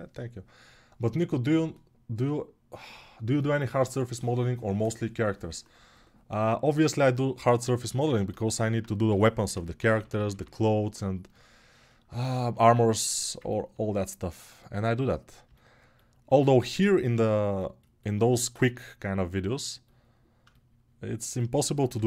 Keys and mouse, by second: 8.8 g, 18.3 2, 21.7 g.